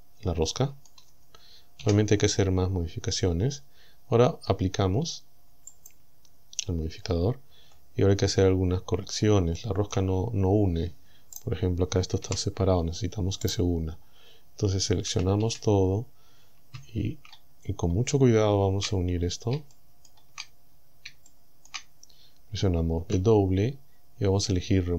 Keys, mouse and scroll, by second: 1.9 KP_7, 5.8 click, 6.7-7.1 scroll up 1, 7.1-7.5 scroll down 2, 7.5 Tab, 8.1-9.1 scroll up 4, 9.2 scroll down 3, 9.6 shift+middle click, 10.3-10.7 shift+scroll up 4, 11.4 right click, 12.3 g, 13.5 right click, 14.0-14.7 scroll down 2, 14.3 middle click, 14.7 middle click, 15.1 a, 17.1-17.4 shift+scroll up 1, 17.4 shift+middle click, 17.8 shift+scroll down 1, 18.3 shift+scroll up 2, 19.1 shift+scroll up 2, 19.7 shift+middle click, 20.1 shift+scroll up 2, 20.2 shift+scroll down 2, 20.7-21.0 scroll up 2, 21.3 shift+middle click, 22.1-22.5 shift+scroll up 5, 23.0 w.